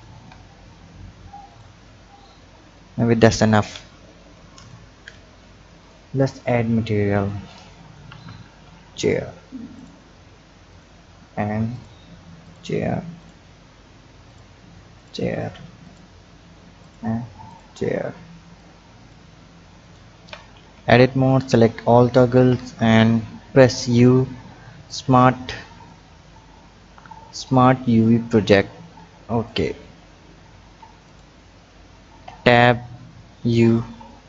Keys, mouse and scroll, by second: 0.1 Tab, 0.8-1.4 scroll down 3, 1.5 click, 2.2 click, 4.0-4.6 scroll down 2, 4.6 click, 5.8 drag, 7.2-9.8 drag, 10.7 click, 11.7-13.3 drag, 14.3-16.0 drag, 16.8-18.6 drag, 19.8 click, 20.2 Tab, 21.0 a, 21.9 a, 23.8 u, 26.8 u, 30.6 Tab, 31.0 click, 32.2 Tab, 33.4 u.